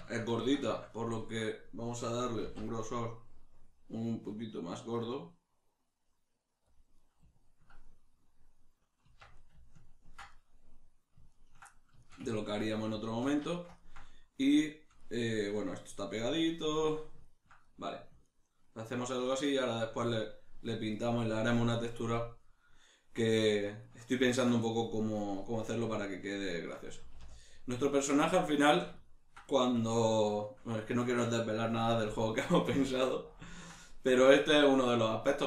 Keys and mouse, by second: 2.4 alt+e, 6.7 click, 6.9-14.0 middle drag, 9.0 Tab, 25.4-35.4 middle drag, 27.0 a.